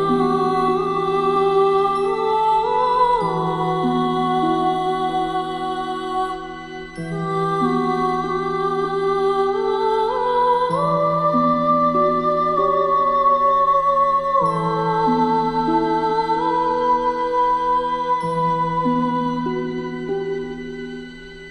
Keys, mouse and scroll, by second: 0.2-0.6 alt+scroll down 1, 0.9 alt+scroll up 1, 1.3-4.3 drag, 5.6-5.9 alt+scroll up 1, 5.9-6.6 click, 8.1 space, 8.2 click, 12.4-13.2 alt+scroll up 2, 13.2-13.6 alt+scroll down 2, 13.6 space, 13.7 click, 14.3-14.7 alt+scroll up 2, 14.7-17.6 drag.